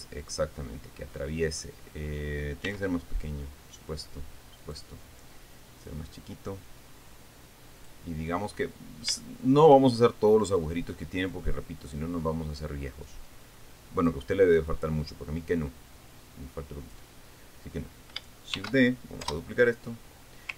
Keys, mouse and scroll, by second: 0.1 scroll up 1, 0.5-2.3 middle drag, 3.2 s, 5.1 click, 6.4-8.6 drag, 9.2 scroll down 1, 9.7 shift+middle click, 10.5 shift+scroll down 2, 11.9 click, 13.6-14.8 drag, 15.3-17.7 drag, 17.8 scroll up 2, 19.1 shift+d, 19.8 Return.